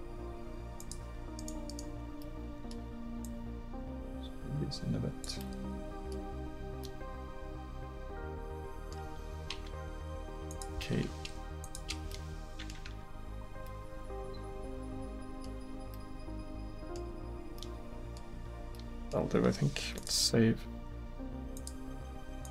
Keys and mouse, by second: 1.4 right click, 2.2 middle click, 5.6 middle click, 9.5 k, 12.9 Tab, 18.9-22.0 middle drag.